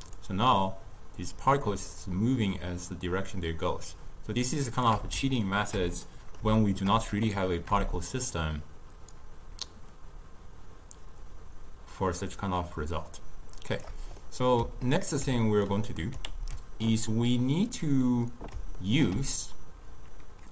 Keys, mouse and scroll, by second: 0.2-3.3 shift+drag, 5.5-7.9 ctrl+middle drag, 7.9-11.0 shift+drag, 14.3-15.8 middle drag, 15.8 click, 16.3 ctrl+x, 17.0-20.5 middle drag.